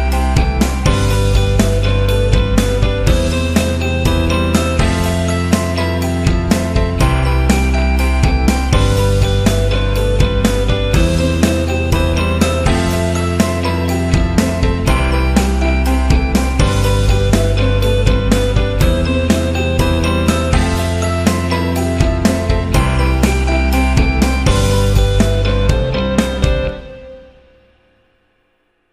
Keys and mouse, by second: 1.5 right click, 2.4 KP_3, 3.1 alt+z, 3.9 g, 6.9 alt+Tab, 6.9 alt+z, 7.2 KP_1, 8.2-11.2 middle drag, 11.6 Tab, 12.1-12.5 middle drag, 13.2 s, 16.2 Tab, 16.6-17.1 middle drag, 17.4-17.7 middle drag, 18.5 middle click, 19.2 KP_1, 19.7 shift+middle click, 20.7 right click, 21.7 shift+middle click, 28.0-28.4 right drag, 28.4 middle drag, 28.8 shift+middle click.